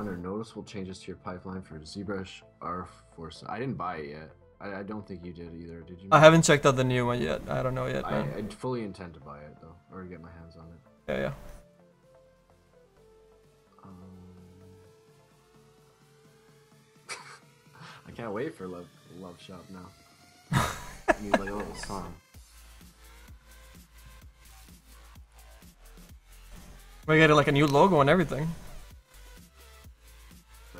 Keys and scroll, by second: 16.2 s, 26.4 s.